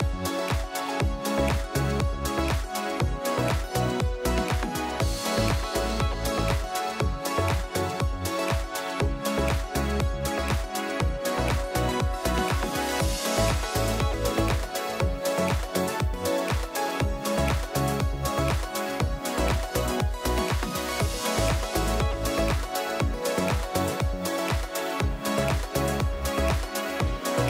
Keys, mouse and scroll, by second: 0.4 click, 1.2 click, 2.0 click, 2.4 click, 3.1 click, 4.1 click, 5.1 click, 6.1 click, 7.0 click, 8.2 click, 8.8 F1, 9.2 click, 14.8 click, 17.1 click, 17.6 F1, 19.1 click, 20.0 click, 21.0 click, 22.7 click, 24.1 click, 26.7 click.